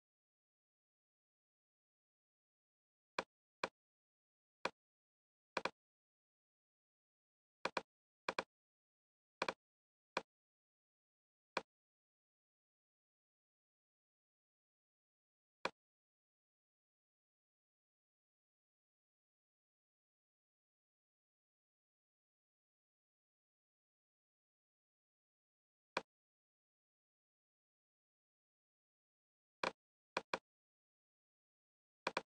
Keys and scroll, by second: 12.5 super+Tab, 15.0 Tab.